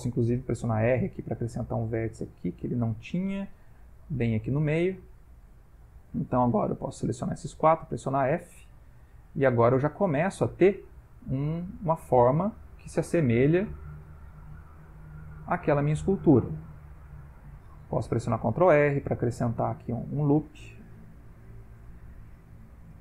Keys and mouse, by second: 0.6 ctrl+r, 3.6 g, 6.0 click, 6.4 shift+click, 6.8 click, 7.2 shift+click, 7.8 f, 8.4 click, 8.6 g, 10.0 ctrl+middle click, 10.5 middle click, 14.3 middle click, 14.9 ctrl+middle click, 15.8 middle click, 18.4 ctrl+r.